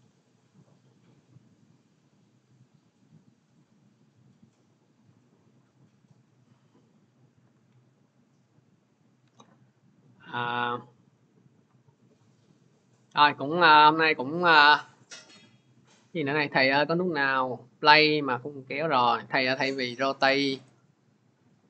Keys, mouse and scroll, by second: 3.4 scroll, 5.3 scroll, 5.5 alt+Tab, 7.3 alt+Tab, 9.2 alt+Tab, 11.5-14.3 drag, 21.4 click.